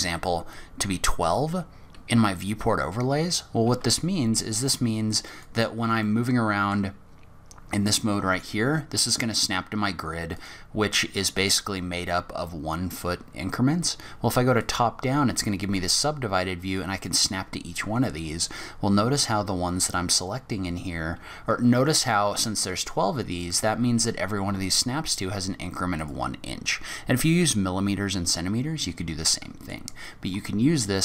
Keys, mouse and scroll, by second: 3.6 g, 6.0 middle click, 7.4-8.2 scroll down 1, 8.2-9.0 scroll down 1, 8.2 g, 14.6 click, 15.6 g, 28.7 scroll down 4, 29.3 middle click.